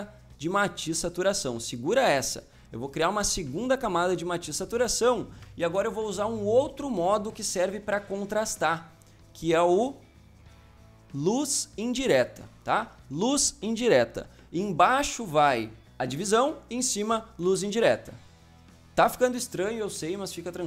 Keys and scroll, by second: 5.7 Return, 7.5 Return.